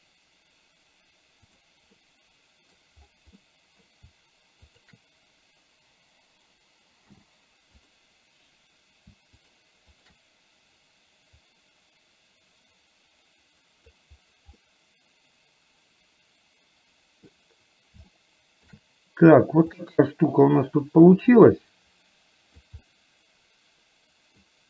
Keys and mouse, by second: 1.6 click, 1.9 middle click, 3.4 middle click, 4.9 shift+click, 7.1 m, 9.4 click, 11.4-14.1 drag, 14.7-17.3 middle drag, 18.2 shift+middle click, 19.8-22.7 drag, 22.9-24.4 middle drag.